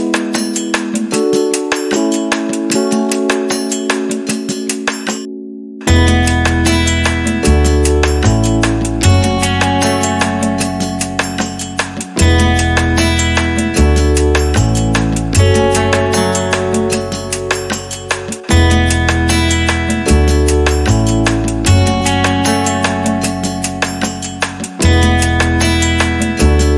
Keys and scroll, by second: 0.0 6, 0.3 0, 1.0 Return, 3.9 6, 4.2 0, 4.6 Return, 6.6 6, 7.2 Return, 10.9 6, 11.2 0, 11.5 Return, 12.2 space, 13.6 r, 15.6 space, 16.7 p, 21.4 space.